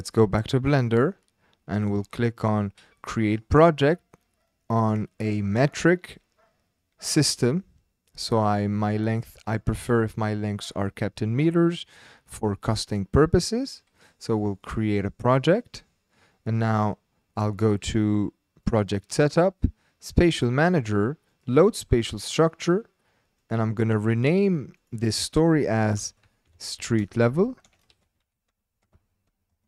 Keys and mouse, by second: 8.3 click, 9.6 click, 14.9 click, 18.6 click, 20.2 click, 24.8-29.5 drag, 26.8 e.